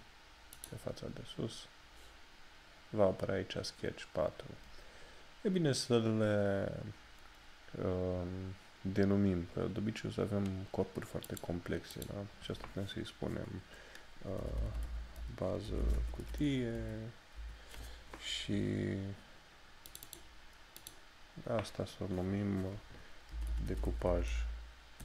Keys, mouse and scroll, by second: 11.3 click, 14.5 b, 16.8 Return, 20.0 click, 23.4 d.